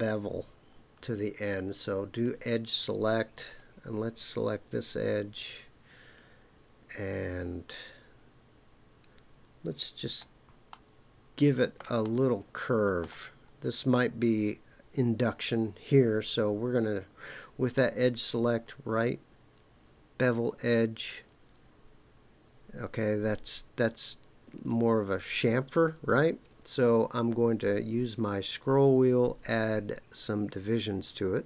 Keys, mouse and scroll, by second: 2.1 click, 3.4 click, 9.8-10.4 scroll up 2, 10.7-11.8 shift+middle drag, 12.1 middle click, 18.5-21.2 right drag, 29.0 scroll up 1, 29.8-31.4 scroll up 1.